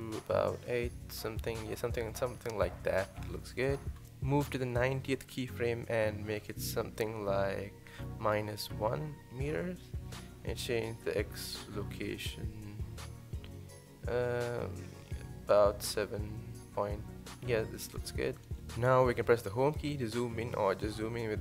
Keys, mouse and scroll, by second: 4.6-6.1 drag, 8.0-12.1 drag, 12.1-12.5 scroll up 1, 12.5-13.0 shift+middle drag, 13.0-13.6 scroll up 4, 13.6-14.6 shift+middle drag, 14.6-17.8 drag, 18.6 click.